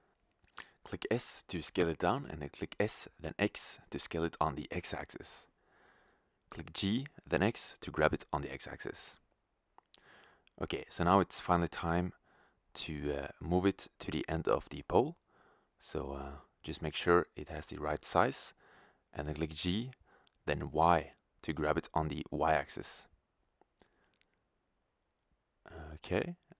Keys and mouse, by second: 1.3 click, 1.8 s, 6.0-8.0 drag, 6.7 g, 9.5-10.0 drag, 10.4-11.3 drag, 11.6 click, 13.0 s, 17.6-19.3 middle drag, 19.9 middle click, 21.4 g, 24.4-26.1 drag.